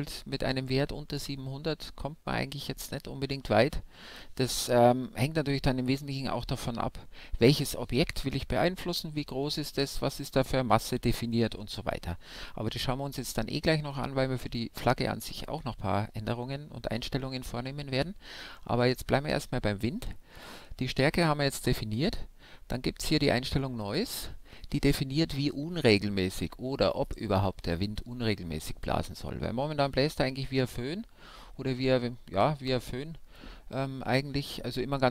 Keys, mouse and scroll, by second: 13.8-23.7 middle drag, 23.7-25.4 drag.